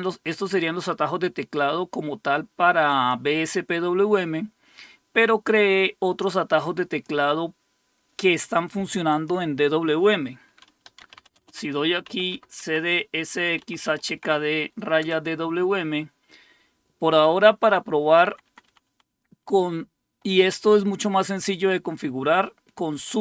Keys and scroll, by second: 10.6-12.3 typing, 12.6 Tab, 13.4-14.1 typing, 15.0 Return, 18.1 Down, 18.2 Down, 18.4 Down, 18.7 Down, 18.8 Down.